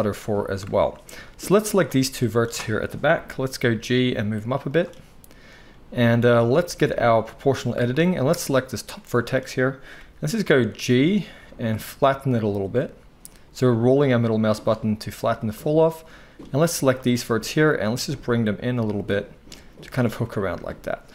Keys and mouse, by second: 1.4-4.8 drag, 2.9 KP_1, 3.7 g, 4.8-7.2 middle drag, 7.2 click, 7.3-8.4 middle drag, 8.4-15.5 drag, 10.0 g, 15.5 middle click, 16.0-20.0 drag, 17.2 g, 20.0-21.1 middle drag, 20.4 Tab, 20.8 z.